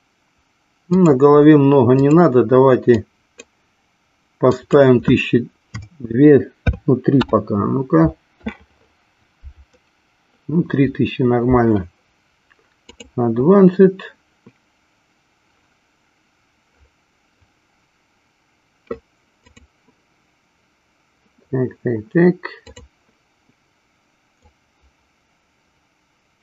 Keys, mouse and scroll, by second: 1.0-8.5 drag, 13.4 click, 19.4 click, 22.5 click, 24.4-26.4 drag.